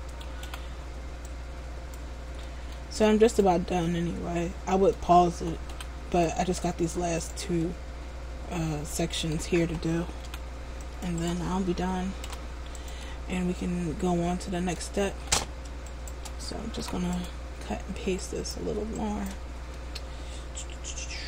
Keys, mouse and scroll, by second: 0.6 c, 3.6 right click, 3.9 middle click, 5.9 c, 7.4 right click, 7.8 middle click, 10.4 c, 11.4 right click, 12.4 p, 15.3 ctrl+z, 16.0 shift+right click, 16.9 p, 18.4 alt+right click, 19.1 alt+right click, 19.2 shift+right click, 19.9 middle click.